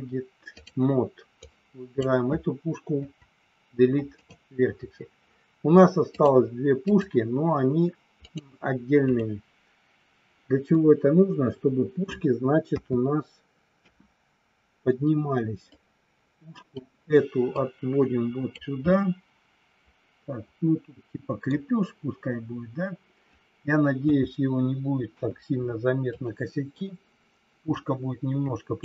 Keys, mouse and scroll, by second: 1.4 click, 2.9 Delete, 6.1 click, 8.1 click, 8.9 click, 10.7-12.0 middle drag, 12.8 KP_3, 13.8 KP_1, 15.7-16.7 drag, 17.5-18.5 drag, 18.8 scroll up 1, 18.9-21.5 middle drag, 21.5 scroll down 1, 24.0 KP_3, 25.1 KP_1, 26.0 click, 27.8-28.8 drag.